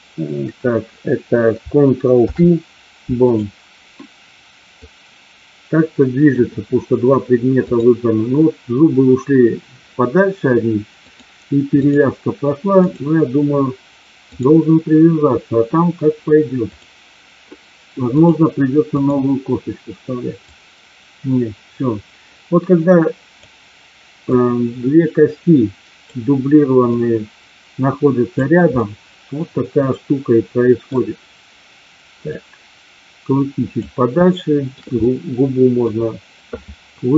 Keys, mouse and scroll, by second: 2.1 ctrl+p, 4.9-6.4 drag, 7.6 click, 11.0 click, 12.8 click, 14.1-15.8 drag, 18.0-19.0 drag, 20.5-23.4 drag, 24.3-26.0 drag, 26.9-28.3 drag, 28.8-30.9 middle drag, 32.3-33.8 drag, 34.3 shift+middle click, 35.0 middle click.